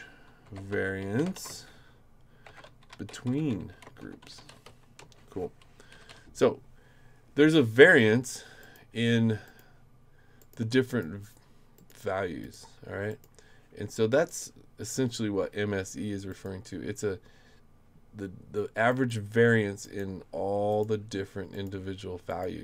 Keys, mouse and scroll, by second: 0.0-5.1 typing, 5.9 Up, 6.1 Up, 8.6 click, 9.4 click, 10.4 click, 10.9 click, 11.7 click, 12.4 click, 13.1 click, 14.3 click, 16.3 click, 18.9 click, 19.8 click, 20.7 click, 21.5 click, 22.3 click.